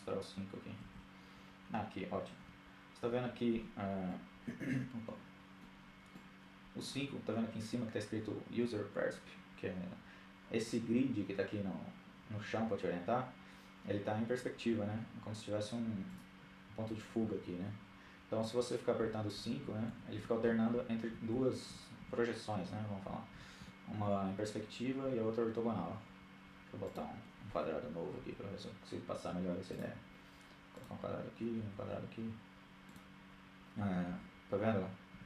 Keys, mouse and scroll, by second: 1.3 KP_2, 3.1-4.5 middle drag, 4.9-6.5 middle drag, 14.7-16.1 drag, 17.7-20.9 typing, 22.0 KP_5, 22.2 KP_5, 22.4 KP_5, 23.8 KP_5, 24.7 KP_5, 25.6-27.0 drag, 27.0 shift+a, 29.7-30.9 drag, 30.6 shift+a, 32.9 KP_5, 34.0 KP_5, 34.5 KP_5.